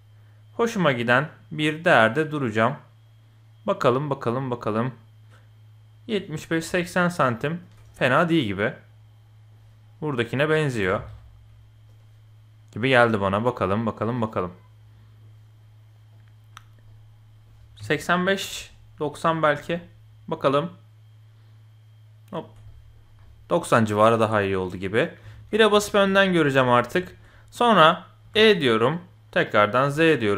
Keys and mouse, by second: 7.9-9.5 middle drag, 10.3-11.9 drag, 10.7 g, 13.5-15.2 drag, 16.1-16.5 drag, 16.8-17.4 middle drag, 17.8 KP_7, 18.4 s, 22.6 middle drag, 23.2-23.9 middle drag, 25.2 KP_1, 25.8 shift+click, 27.0 shift+drag, 28.2 e, 29.9 middle click.